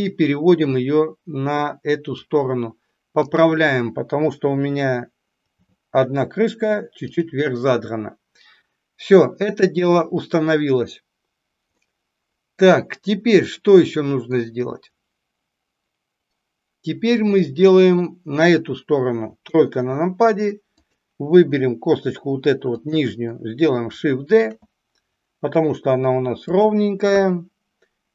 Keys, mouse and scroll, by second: 3.2 click, 5.4 g, 11.8-14.2 middle drag, 19.3 KP_3, 20.7 click, 22.7 click, 24.3 shift+d, 27.2 KP_1.